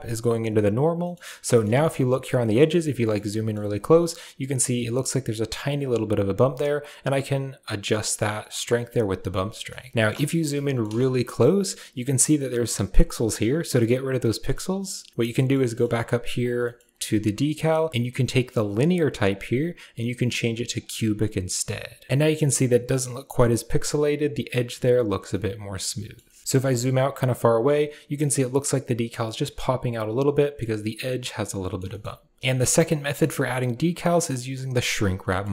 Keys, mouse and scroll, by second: 0.8 middle click, 1.3 middle click, 2.3 ctrl+middle click, 3.0 middle click, 6.7-9.2 drag, 9.7 ctrl+middle click, 10.1 shift+middle click, 10.4 ctrl+middle drag, 10.9 shift+middle click, 14.0-14.7 middle drag, 15.1 middle click, 16.2 click, 16.5 middle click, 18.6-21.2 drag, 22.0 middle click, 25.2-26.0 middle drag, 26.1 shift+middle click, 26.6 shift+middle click, 31.1-31.6 middle drag, 31.8 shift+middle click, 32.4 shift+middle click, 32.4 shift+n, 32.7 middle click, 35.1 shift+middle click.